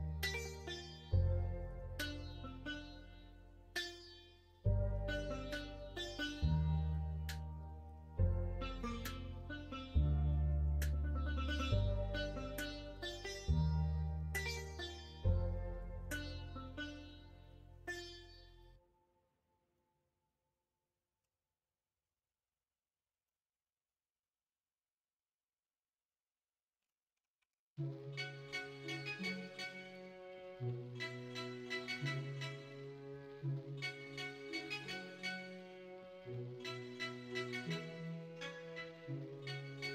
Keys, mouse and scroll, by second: 11.7 middle click, 15.6 middle click, 16.8 middle click, 19.7-21.2 middle drag, 23.2-26.8 middle drag, 27.3 1, 32.2 s, 34.8 2, 35.8 middle click, 38.0 middle click, 39.0 Tab, 39.6 Tab, 39.8 middle click.